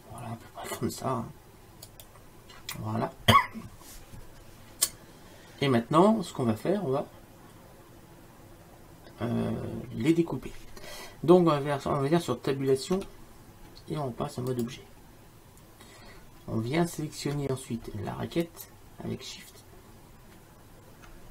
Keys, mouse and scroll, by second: 13.2 Tab.